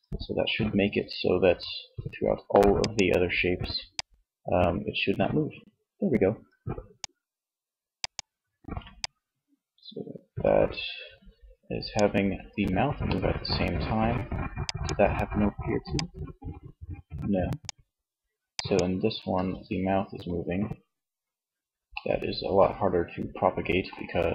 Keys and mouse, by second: 11.6-13.6 middle drag, 13.6 click, 18.4 Tab.